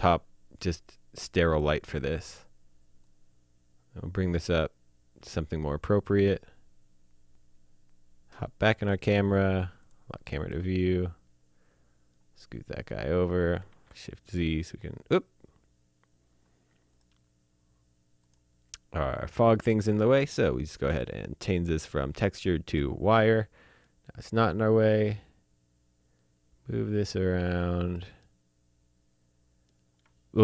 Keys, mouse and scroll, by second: 0.2-1.4 scroll down 1, 1.5 click, 2.3 click, 4.3 click, 5.8 shift+Num_Lock, 5.8 shift+middle click, 8.8 click, 10.5 shift+middle click, 13.6 shift+z, 16.9 click, 20.9 click, 22.6 click, 23.8 shift+middle click, 28.2 shift+middle click.